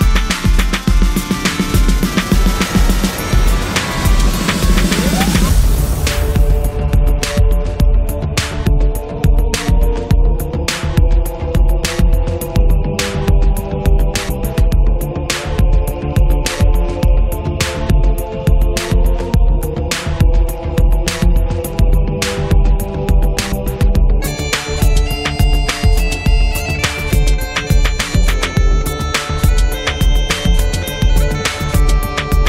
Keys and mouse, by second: 0.6 1, 0.9 f, 1.4-2.6 drag, 2.1 middle click, 2.1 right click, 2.6-4.6 drag, 2.8 middle click, 2.8 right click, 4.6 middle click, 4.6-7.2 drag, 4.6 right click, 7.2 right click, 7.9 click, 8.3 middle click, 8.4-9.4 drag, 9.8-11.6 drag, 12.3-13.7 drag, 13.8-14.8 drag, 14.7 f, 15.4 click, 15.8-16.9 drag, 17.0 middle click, 17.0 click, 17.1 middle click, 17.7 click, 18.4-19.5 middle drag, 19.5-20.7 drag, 20.7 middle click, 20.8-22.0 drag, 22.4 middle click, 22.5-24.2 drag, 24.7 g, 24.9 f, 25.4 click, 26.4 click, 27.4-28.4 drag, 27.4 right click, 28.4 f, 28.4 middle click, 28.7-31.4 drag, 31.4 middle click, 32.0 click.